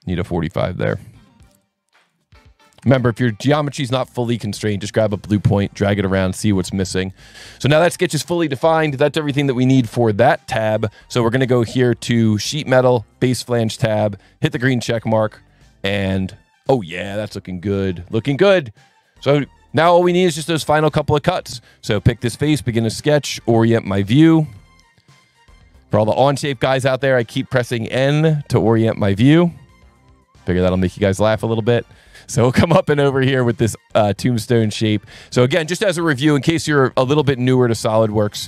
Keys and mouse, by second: 0.1 click, 0.8 click, 1.5 click, 2.0 click, 2.6 KP_4, 2.8 KP_5, 3.0 KP_Enter, 12.3 click, 13.1 click, 14.7 click, 15.9 click, 21.5 click, 22.2 click, 22.7 n, 24.5 ctrl+8, 25.2 s, 26.6 click, 30.1 click, 31.3 click, 33.4 click, 34.4 click, 35.3 click, 35.5 Escape, 35.9 space, 36.0 click, 36.7 Escape, 37.4 click, 38.1 Delete.